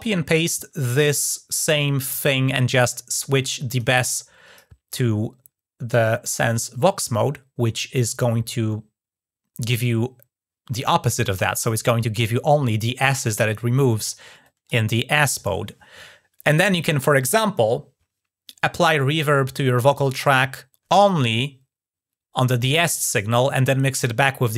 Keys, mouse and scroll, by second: 2.9 click, 3.8 click, 14.2 click.